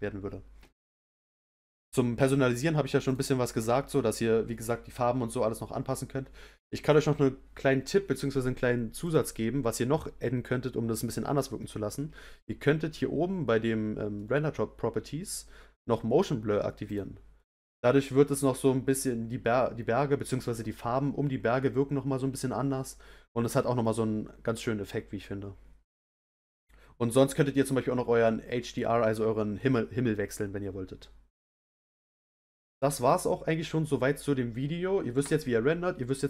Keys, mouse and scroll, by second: 4.4 click, 16.8 click.